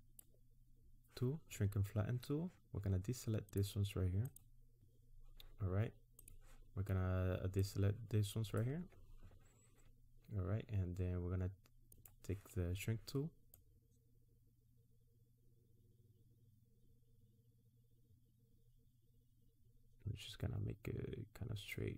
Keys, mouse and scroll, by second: 3.5 ctrl+click, 4.3 ctrl+click, 4.8 alt+click, 6.2 click, 7.6 ctrl+click, 11.9 click, 13.5 click.